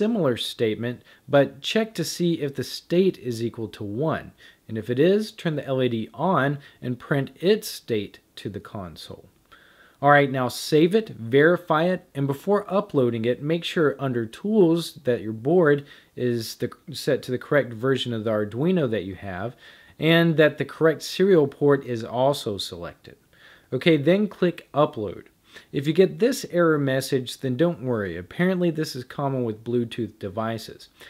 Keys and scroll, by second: 1.6-10.1 typing.